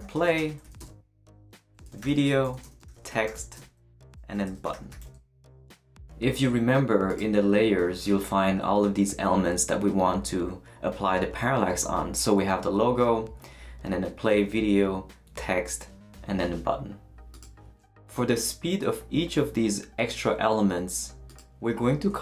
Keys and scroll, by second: 0.0-5.5 typing, 5.5 shift+super+n.